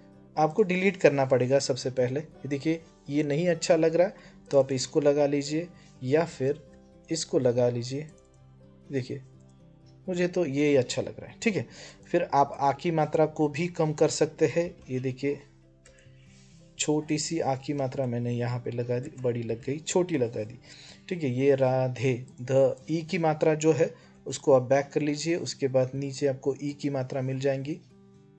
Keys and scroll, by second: 1.6 BackSpace, 2.9 BackSpace, 6.5 BackSpace, 9.8 BackSpace, 14.4 <, 15.6 BackSpace, 17.6 BackSpace, 17.7 {, 18.9 BackSpace, 19.3 [, 24.0 BackSpace.